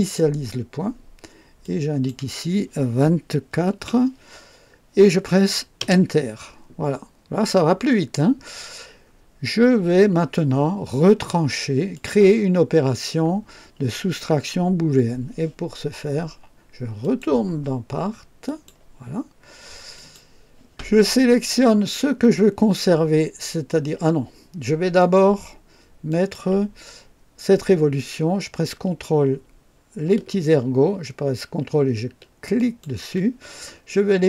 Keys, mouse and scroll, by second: 1.6 click, 3.3 KP_2, 3.7 KP_4, 3.9 KP_4, 5.8 Return, 11.9 click, 16.9 click, 18.4 click, 19.9 click, 26.0 click, 32.5 ctrl+click.